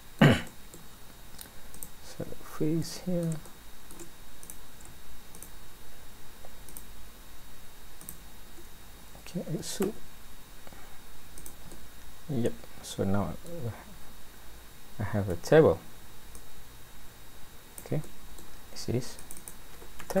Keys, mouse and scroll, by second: 0.5 middle click, 1.8 click, 2.0-2.8 scroll up 1, 2.8 scroll up 2, 2.8 middle click, 3.4 shift+middle click, 4.4 click, 5.3 shift+click, 6.7 click, 8.0 shift+click, 8.8-9.5 scroll down 2, 9.9 e, 11.7 middle click, 15.3 Tab, 16.3 click, 18.1 middle click, 19.2 click.